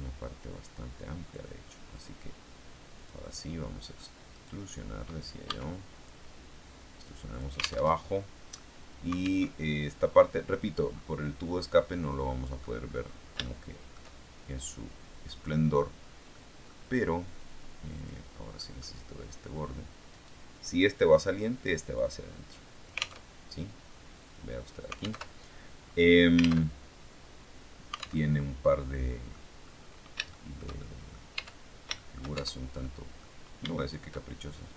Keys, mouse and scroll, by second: 2.9 click, 4.3 right click, 5.3 e, 7.2 alt+click, 7.7 alt+Tab, 9.3 alt+Tab, 9.9 click, 10.1 middle click, 10.8-12.1 scroll down 1, 12.1 middle click, 12.7-13.3 scroll up 1, 13.3 shift+middle click, 15.2 click, 16.2 middle click, 17.9 click, 18.5 middle click, 20.0 right click, 21.9-23.1 drag, 23.1 alt+Tab, 25.1 alt+Tab, 26.5 alt+Tab, 28.1 alt+Tab, 28.6 middle click, 29.4-30.0 scroll up 2, 30.2-31.2 shift+middle drag, 31.3 shift+Tab, 31.9 shift+middle click, 32.3 shift+Tab, 32.7 shift+middle click, 33.7 shift+middle click.